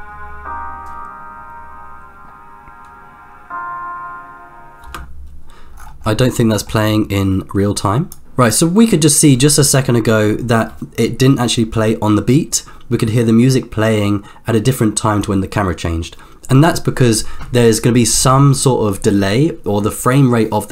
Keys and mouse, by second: 4.8 space, 6.4 middle click, 7.8-8.7 drag, 8.2 space.